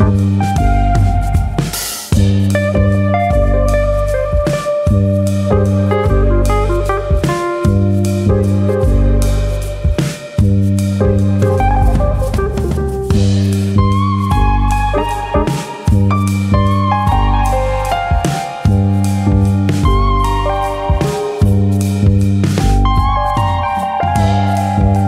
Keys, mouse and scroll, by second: 1.2 click, 1.6 middle click, 2.0-2.6 scroll up 1, 2.6 middle click, 3.3 alt+click, 3.6 middle click, 3.9 s, 7.3 click, 7.6 middle click, 9.0 click, 9.3 middle click, 10.2 ctrl+click, 10.6 middle click, 17.5 x, 19.1 middle click, 20.9 alt+click, 21.4 s.